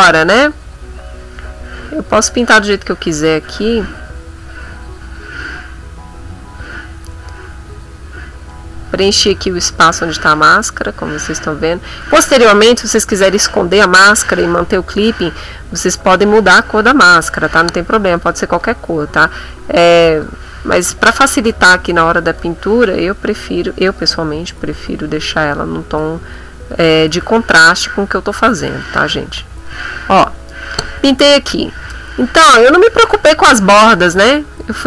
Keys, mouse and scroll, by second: 10.5-12.2 drag, 17.6 click, 18.6-20.4 drag, 20.5 click, 21.6-26.1 drag, 26.3 click, 26.9-30.3 drag, 29.0 middle click, 32.5-34.8 drag.